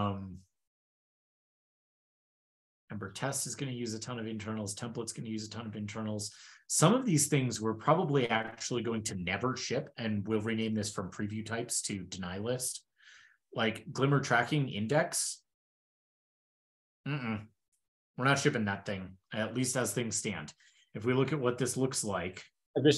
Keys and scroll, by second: 1.0 super+w.